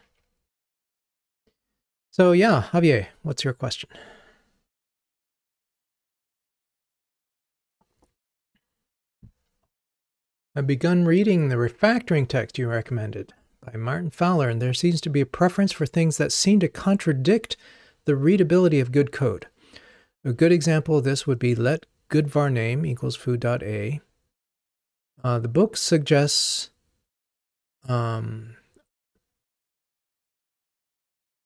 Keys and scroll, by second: 1.3 ctrl+r.